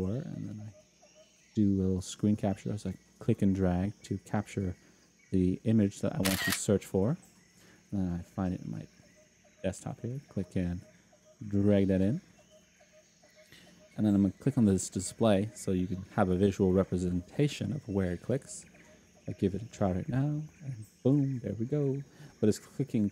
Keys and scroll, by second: 20.2 F10.